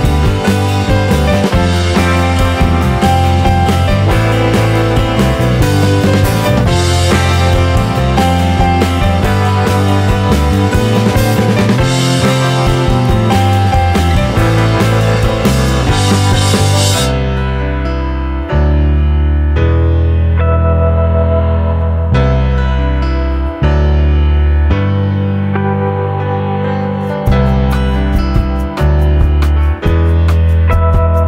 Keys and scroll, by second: 29.7-31.2 typing.